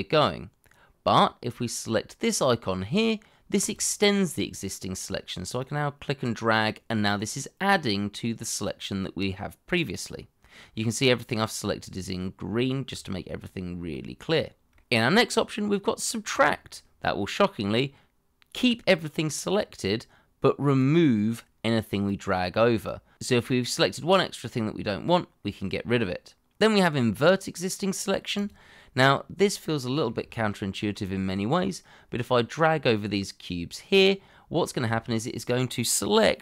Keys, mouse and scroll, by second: 12.6 shift+middle click, 13.1-13.8 scroll up 1, 13.9 shift+middle click, 29.1-29.4 scroll down 1, 29.4 middle click, 30.4 shift+middle click.